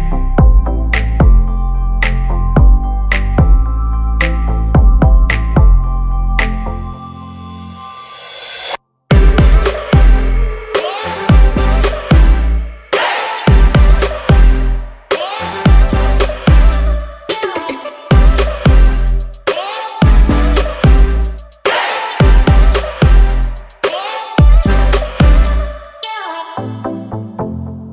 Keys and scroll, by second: 0.4 space, 0.7 p, 5.1 space, 7.0 m, 7.7 Up, 8.2-9.2 typing, 12.9 space, 12.9 Escape, 15.0 l, 17.0-20.7 typing, 17.7 Escape, 19.7 Return, 21.5 Up, 22.3-25.0 typing, 25.1 Return, 26.2 space, 26.5 p, 27.0 space.